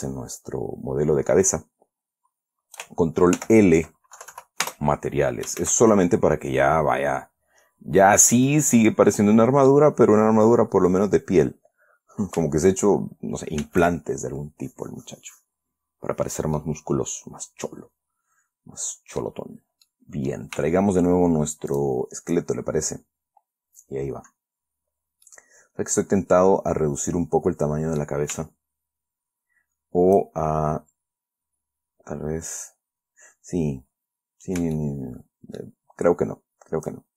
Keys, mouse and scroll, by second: 3.7 ctrl+l, 4.5 ctrl+Down, 5.0 ctrl+Return, 6.0 shift+z, 8.0-8.8 scroll down 4, 8.8-10.2 drag, 10.6-11.0 scroll up 2, 14.0 shift+z, 14.7 scroll down 2, 15.3 scroll up 2, 15.7 scroll down 2, 16.9-20.8 middle drag, 19.8-20.2 scroll down 2, 22.1 shift+click, 23.4-24.0 scroll up 2, 24.6-25.3 scroll down 4, 25.6-28.5 middle drag, 33.8-34.5 scroll up 4, 35.1-36.1 shift+middle drag.